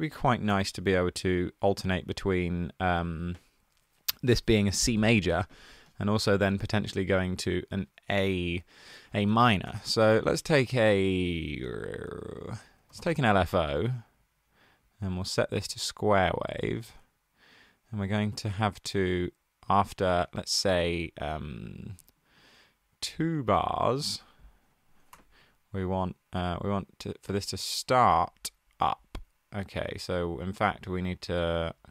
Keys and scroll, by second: 0.0-0.5 typing, 8.9 super+a, 9.5 BackSpace, 9.6 BackSpace, 9.8 BackSpace, 10.6 b, 12.4-13.6 typing, 19.9 ⟲, 25.0 2.